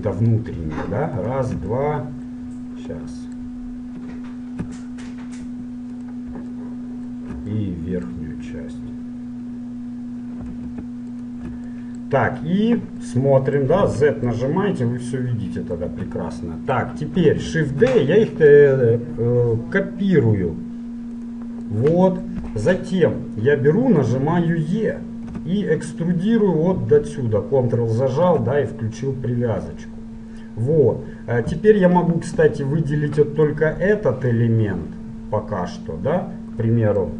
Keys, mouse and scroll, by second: 1.9-3.2 middle drag, 3.2-4.8 scroll up 1, 4.8 scroll down 1, 6.0 right click, 6.9-11.3 middle drag, 11.3 right click, 11.9-14.0 middle drag, 14.0 z, 15.4-16.4 middle drag, 16.1 z, 16.6-18.5 middle drag, 17.7 shift+d, 21.8-25.3 middle drag, 25.3 e, 32.5 l, 33.6-35.5 middle drag.